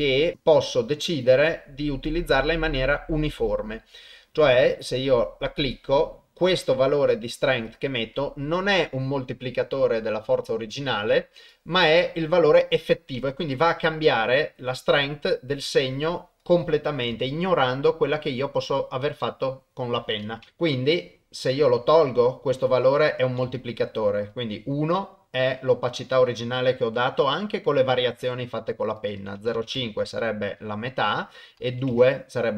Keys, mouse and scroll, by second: 1.2 click, 5.6 click, 11.6-16.4 drag, 19.2 middle click, 20.4 KP_0, 22.7 click, 29.1 click, 31.0 click.